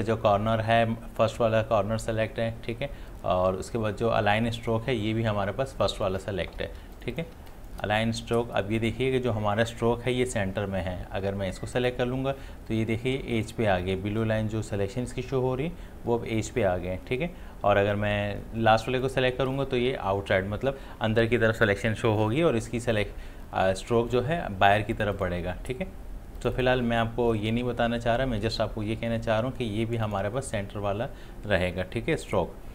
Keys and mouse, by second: 6.7 click, 6.8 space, 7.0 ctrl+click, 7.4 ctrl+space, 7.5 click, 11.8 click, 19.0 click, 24.9 click, 30.1 click.